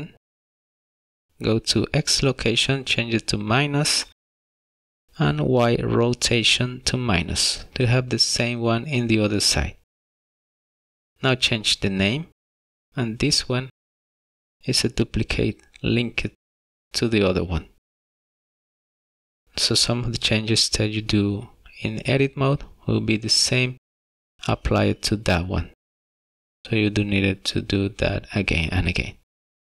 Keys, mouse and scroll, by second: 1.9 click, 10.4 click, 15.8 n, 18.3 click, 18.5 click, 20.4 BackSpace, 20.8 BackSpace, 27.2 middle click.